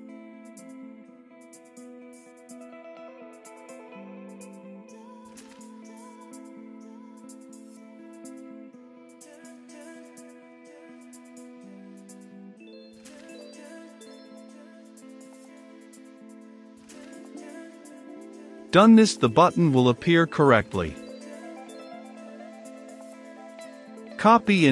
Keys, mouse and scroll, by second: 1.7-6.2 drag, 6.2 middle click, 6.9 click, 7.7 w, 7.8 i, 8.3 ctrl+space, 8.8 Return, 11.1-13.4 drag, 13.4 h, 13.9-16.2 drag, 16.6 ctrl+s, 18.1-22.3 drag, 22.3 right click, 23.2 click, 24.2 ctrl+c.